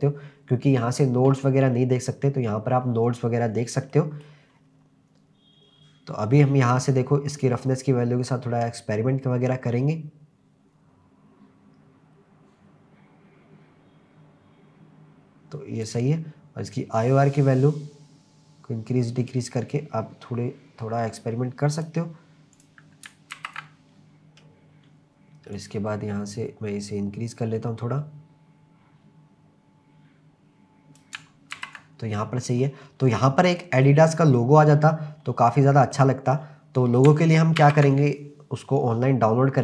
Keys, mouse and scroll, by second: 3.4-4.2 scroll up 4, 3.9 middle click, 4.6-5.6 scroll up 4, 5.6 scroll up 2, 6.0-6.4 middle drag, 6.4 scroll up 1, 7.4-15.8 drag, 16.7-21.8 drag, 22.6 click, 23.4 ctrl+s, 23.7 scroll down 2, 25.5-31.0 drag, 25.5 scroll down 1, 31.6 ctrl+s, 31.9-32.5 scroll up 4, 32.8-33.2 scroll down 3, 33.2-33.9 middle drag, 34.2-34.6 scroll up 3, 35.1-35.5 scroll up 2, 35.5-36.0 middle drag, 36.3-36.6 scroll down 3, 37.6 ctrl+s.